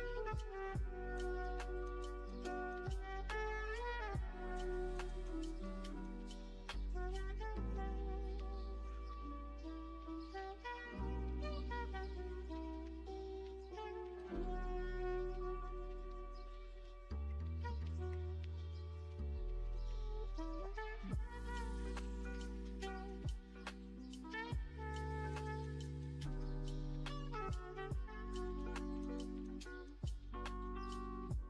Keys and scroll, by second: 3.1-4.0 scroll, 8.2 space, 8.7 space, 12.5 F1, 16.0 v, 17.6 ctrl+space, 18.0-20.0 typing, 29.0 1.